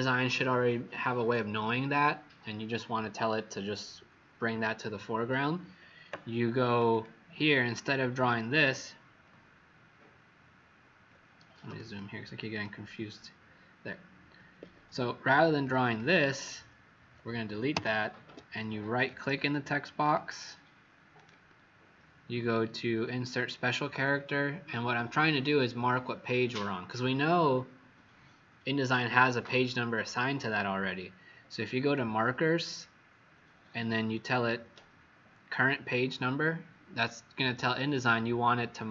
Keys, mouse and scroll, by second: 6.6 click, 6.8 click, 8.2 click, 9.9-10.6 alt+scroll up 1, 11.6 z, 11.9 click, 14.5 Escape, 15.2 t, 15.6 click, 17.7 Delete, 18.2 Escape, 18.9 right click, 20.2 click, 21.1 right click.